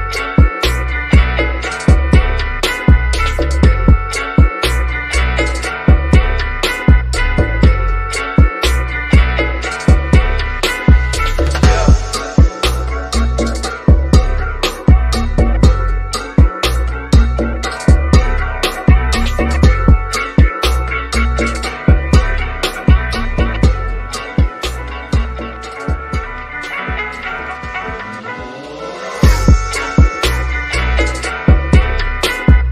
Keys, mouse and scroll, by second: 0.4 Return, 3.5 scroll down 1, 4.4 shift+middle click, 5.5-7.1 shift+middle drag, 7.1 click, 8.1 shift+click, 13.9 Escape, 14.7-17.2 shift+middle drag, 17.2 scroll up 1, 18.4 click, 21.2 1, 22.4 Return, 25.9 scroll down 1, 26.2 shift+middle click, 27.0-27.4 scroll down 1, 27.7 middle click, 28.4-29.7 shift+middle drag, 30.4-31.0 scroll down 1, 31.0 middle click, 31.1 middle click, 31.6-32.4 scroll up 1, 32.4 Escape.